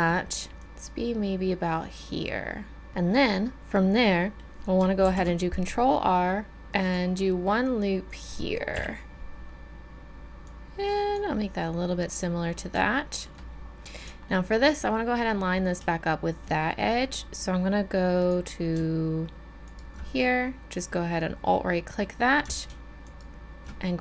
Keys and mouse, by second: 0.5 middle click, 0.6-2.9 drag, 4.1 middle click, 5.1 ctrl+r, 8.8 KP_1, 18.3-20.3 drag, 19.7 right click, 20.3 middle click.